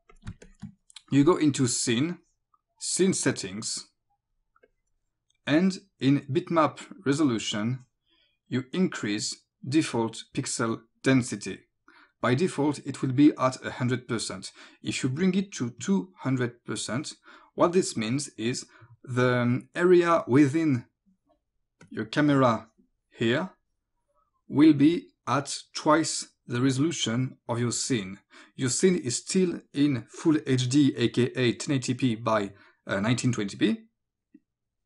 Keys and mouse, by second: 0.1 click, 0.3 space, 0.5 click, 3.4 click, 4.7 click, 7.4 click, 17.4 click, 21.9 click.